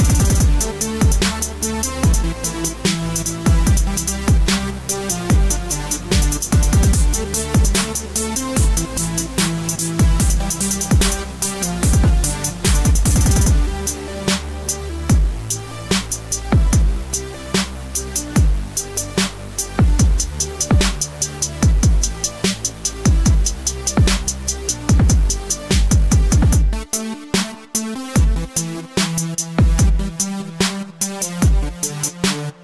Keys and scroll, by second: 10.5-11.9 typing, 11.9 ctrl+c, 12.5 ctrl+v, 26.0 Right, 26.7 Left, 27.5 Right, 27.9 Left.